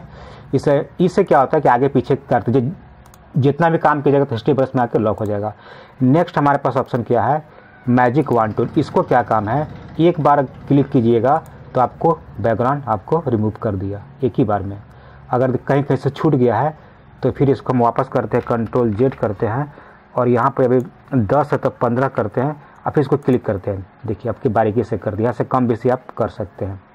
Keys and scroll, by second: 19.0 ctrl+z.